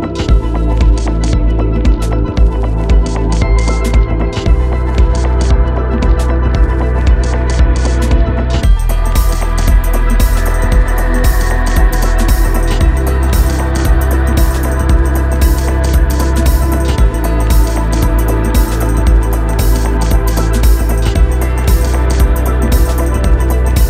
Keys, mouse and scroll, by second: 1.6 6, 8.4 Return, 9.4 click, 13.6 click, 17.1 0, 18.6 Return, 20.5 click.